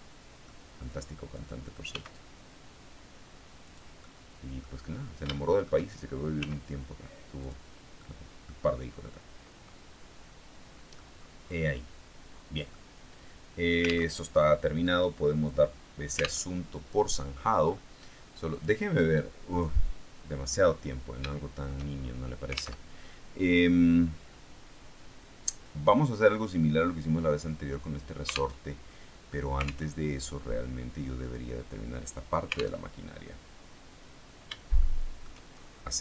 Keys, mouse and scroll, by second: 0.8 click, 1.8 s, 3.6 click, 3.9 middle click, 4.7-5.2 scroll up 1, 5.2 shift+middle click, 6.3 s, 7.3 click, 7.9 middle click, 9.0-11.4 middle drag, 11.4-12.0 scroll down 1, 12.6-14.0 middle drag, 14.0 alt+Tab, 16.4 alt+Tab, 17.1-17.8 scroll down 2, 17.8-18.4 scroll up 2, 18.4 click, 19.4 click, 21.2-22.3 shift+middle drag, 22.6 alt+Tab, 28.4 alt+Tab, 29.8 alt+Tab, 32.7 alt+Tab, 34.7 shift+middle click, 35.3-36.0 shift+scroll up 3.